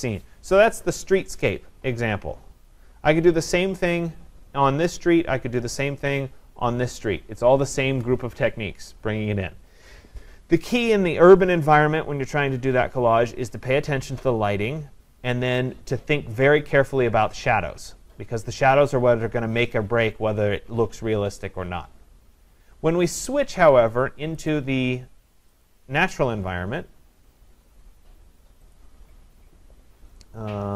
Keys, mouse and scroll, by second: 3.5 click, 5.8 click, 24.5 click, 25.6 click, 27.7-28.7 scroll, 28.7 click, 28.7-29.5 scroll.